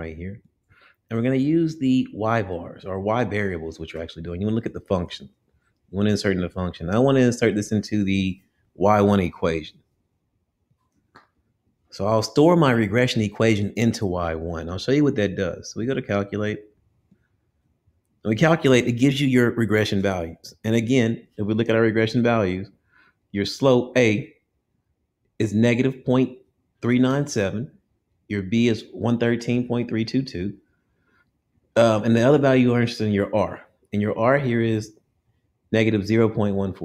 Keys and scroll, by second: 3.0 Right, 6.3 Return, 10.8 Return, 15.9 Down, 17.3 Return.